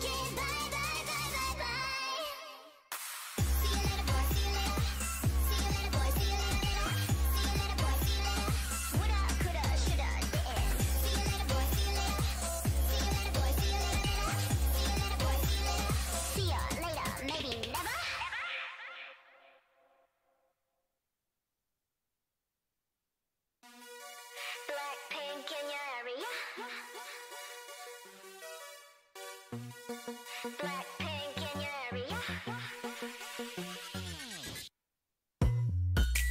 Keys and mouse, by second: 3.0 middle click, 4.5 e, 4.8 s, 5.8 s, 6.7 a, 6.9 a, 7.0 g, 8.8 KP_3, 10.1 s, 10.9 g, 12.1 s, 13.6 s, 14.1 g, 14.9 click, 17.9 g, 19.4 a, 20.1 middle click, 21.1 right click, 22.9 s, 24.4 s, 25.8-26.9 right drag, 27.9 s, 29.6 a, 29.7 a, 30.0 s, 31.0 g, 32.5 z, 33.4 z, 33.6 z.